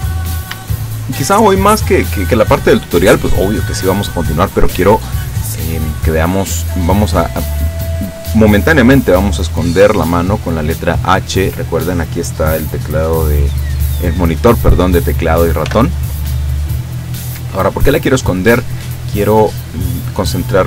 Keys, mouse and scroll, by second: 0.0-0.4 scroll up 1, 0.7 shift+middle click, 5.0-6.9 drag, 7.0 right click, 15.7 h, 16.9-19.0 drag, 19.0-20.6 middle drag.